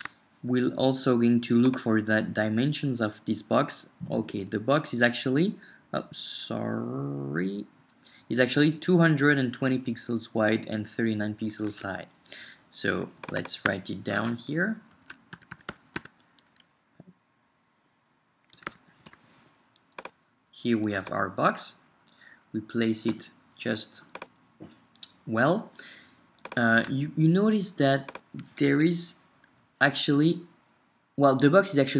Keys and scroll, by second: 11.8 super+Tab, 14.2 Tab, 14.4 shift+super+Down, 14.9 shift+super+Left, 15.3-16.2 typing, 18.3-19.9 typing, 26.8 super+Tab, 28.7 Escape.